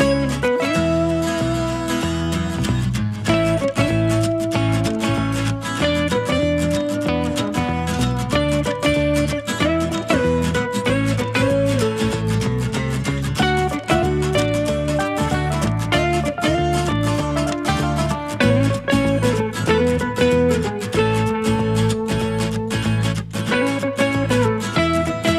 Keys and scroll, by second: 5.8 shift+Escape, 6.2-6.9 typing.